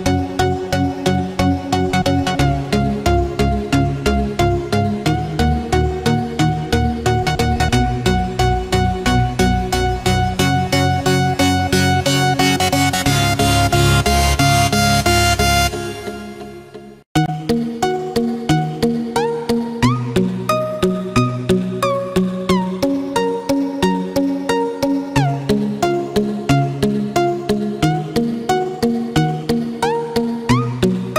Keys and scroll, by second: 6.9 ctrl+f, 7.2 ctrl+d, 7.9 ctrl+-, 9.0 ctrl+=, 17.7 ctrl+f, 17.9 ctrl+d, 18.5 ctrl+-, 18.6 ctrl+space, 21.9 ctrl+f, 25.7 ctrl+f, 25.9 ctrl+d, 29.9 ctrl+f, 30.1 ctrl+d.